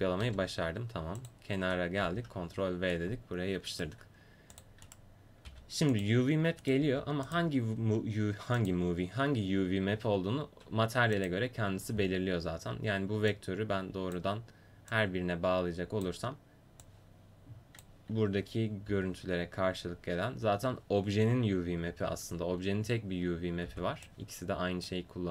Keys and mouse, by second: 0.3 Delete, 2.1 ctrl+v, 4.6-5.9 drag, 4.6-5.9 right drag, 5.6 g, 6.5 click, 6.8 g, 8.6-10.3 drag, 13.3-18.5 drag, 18.9 a, 23.7 b.